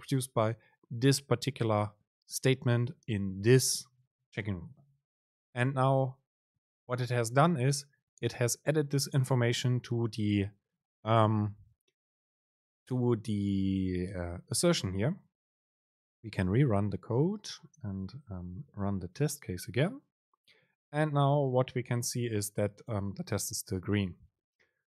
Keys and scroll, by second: 16.7 super+r.